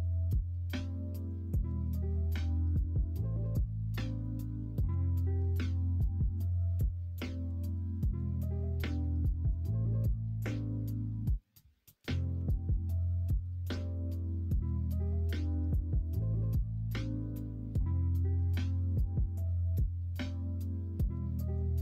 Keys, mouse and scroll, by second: 4.8 s, 7.1 g, 9.5 q, 12.3 Tab, 12.7 q, 16.4-17.7 middle drag, 18.5 x, 19.4-21.5 middle drag.